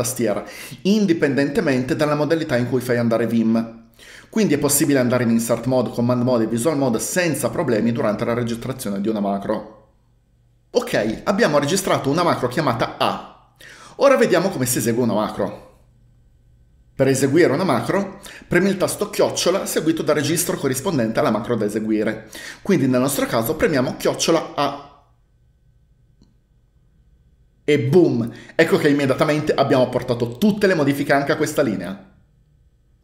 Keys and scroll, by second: 24.1-25.1 typing.